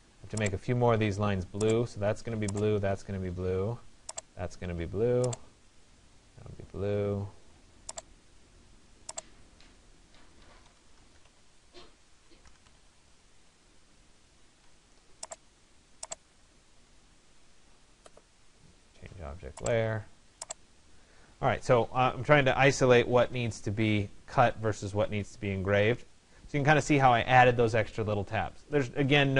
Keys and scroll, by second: 11.8 p.